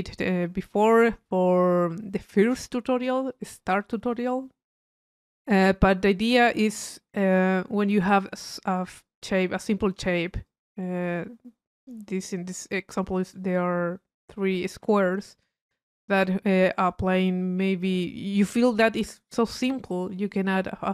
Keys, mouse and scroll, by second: 6.5 click, 7.5 middle click, 8.2 click, 9.6 click, 10.5 click, 11.0 middle click, 11.7-13.1 drag, 20.8-20.9 middle drag.